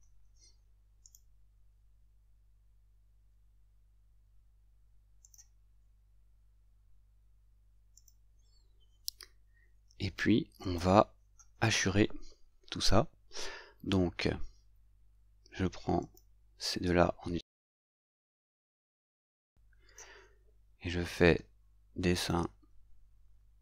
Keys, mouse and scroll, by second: 1.1 right click, 8.0 click, 10.7 click, 16.1 click.